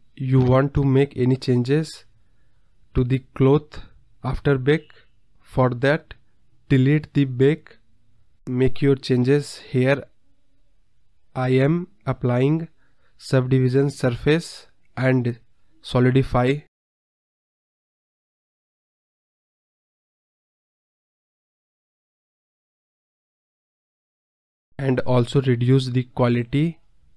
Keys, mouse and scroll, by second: 0.6-1.7 scroll up 28, 2.8 scroll down 1, 3.0 space, 3.1 click, 3.9 click, 4.2 scroll up 4, 4.4-5.9 scroll down 12, 5.9-7.4 drag, 7.8 click, 11.0 scroll up 2, 11.2-12.0 scroll down 1, 12.0 click, 12.7 click, 14.2 click, 14.5-14.8 scroll down 6, 15.1 click, 15.9 KP_0, 16.4-16.7 scroll up 2, 16.4 middle drag, 16.7-17.4 middle drag, 17.4 click, 18.5 click, 18.8 KP_0, 19.2-19.7 middle drag, 19.7 scroll up 1, 19.7 middle drag, 19.8-20.4 scroll down 4, 20.4 middle click, 21.4 space, 22.3 KP_0, 23.1 KP_1, 23.3 space, 23.7 click, 24.2-24.6 middle drag, 24.6 KP_1, 25.8-26.6 scroll up 3.